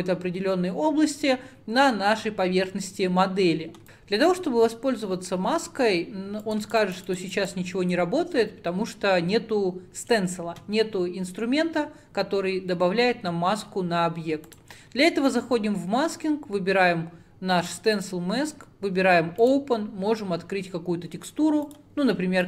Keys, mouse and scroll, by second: 3.8 ctrl+z, 17.7 click, 19.8-22.4 drag.